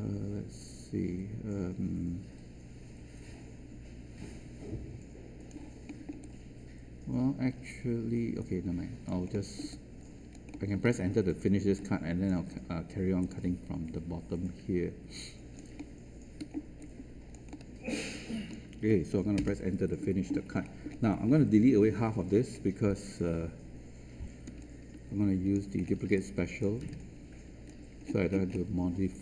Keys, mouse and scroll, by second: 5.8 alt+middle click, 6.2-9.0 alt+drag, 9.3 alt+middle click, 10.2 alt+click, 11.7 alt+click, 13.2-15.5 alt+drag, 15.7 alt+middle click, 16.7 alt+click, 19.3 Return, 20.5-21.2 scroll down 1, 22.5-22.9 scroll up 1, 24.4 q, 25.8 scroll down 1, 26.5-28.0 alt+drag, 26.8 space, 28.0-28.8 scroll down 2.